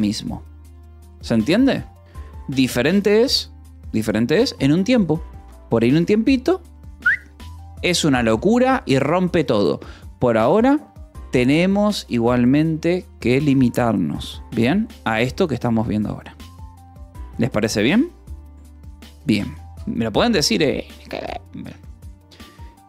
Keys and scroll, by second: 0.1 ctrl+s, 21.0 Escape.